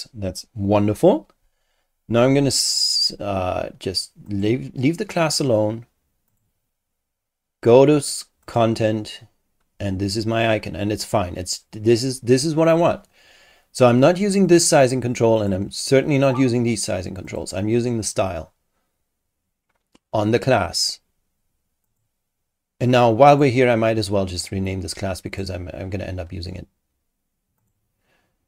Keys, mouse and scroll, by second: 2.0-2.4 scroll up 2, 4.3 click, 6.3 click, 8.4 click, 14.4 click, 15.4 click, 17.3 click, 18.0 click, 21.8 click, 23.3 click, 25.3 click, 27.6 click.